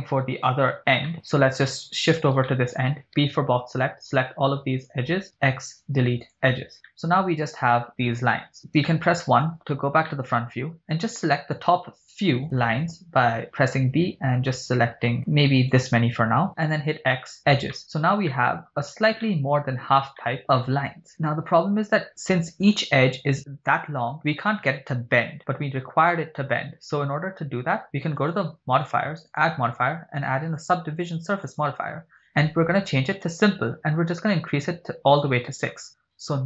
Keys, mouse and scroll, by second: 0.5 KP_1, 0.8-1.1 scroll down 3, 1.1 shift+middle click, 2.1 scroll up 3, 2.5 shift+middle click, 3.2 b, 5.5 x, 6.8 scroll down 2, 6.9 middle click, 8.6 KP_1, 8.8 shift+middle click, 9.7 scroll down 3, 10.1 shift+middle click, 12.2 b, 16.9 x, 17.8 middle click, 18.3 shift+middle click, 18.8 scroll up 2, 19.3 middle click, 20.3 middle click, 22.1-22.4 scroll up 3, 22.8 right click, 25.5 Tab, 26.9 Tab, 27.6 Tab, 28.4 click, 29.4-31.7 drag, 33.4 click, 34.2 click, 35.2 click, 36.1 Tab.